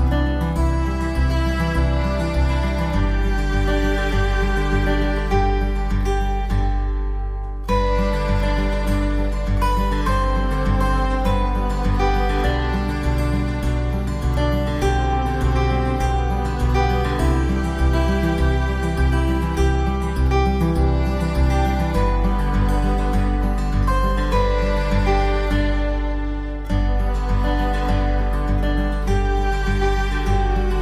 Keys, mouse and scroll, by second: 0.4 click, 0.6 click, 1.2 click, 1.4 middle click, 1.7 click, 2.3 BackSpace, 2.4 middle click, 2.4 scroll down 1, 2.6 middle click, 3.0 middle click, 4.1 click, 5.9 shift+click, 6.7 scroll down 1, 6.9 middle click, 7.1 click, 8.1 click, 8.2 click, 8.6 shift+click, 8.7 shift+click, 9.0 shift+click, 10.4 click, 10.7 click, 10.8 scroll up 1, 11.0 middle click, 12.2 middle click, 12.7 click, 12.9 middle click, 13.7 click, 15.5 middle click, 15.6 middle click, 17.2 middle click, 17.4 click, 17.8 middle click, 18.0 click, 18.1 click, 18.5 click, 18.6 scroll up 1, 18.9 middle click, 19.3 click, 19.7 click, 20.1 click, 20.4 middle click, 20.6 click, 20.6 click, 20.8 Down, 21.1 click, 21.3-21.9 scroll up 2, 21.6 click, 21.7 Down, 21.9 middle click, 22.0 click, 22.3 click, 22.4 middle click, 22.4 scroll down 1, 23.0 click, 23.2 scroll down 1, 23.3 middle click, 23.6 click, 23.8-24.2 scroll down 1, 24.3 middle click, 25.0 Delete, 25.2 click, 25.4 shift+click, 25.5 shift+click, 25.7 shift+click, 25.9-27.3 typing, 26.7 click, 27.2 click, 28.6 click, 28.9 click, 29.7 click, 29.9 Delete, 30.1 click, 30.7 click.